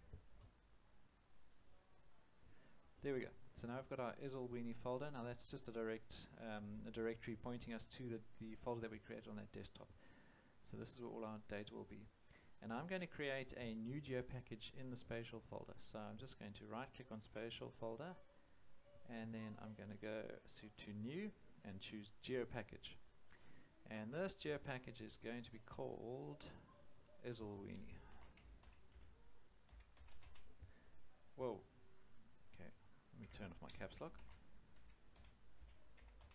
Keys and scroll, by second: 27.9-30.7 typing, 33.2 Caps_Lock, 34.2-36.3 typing.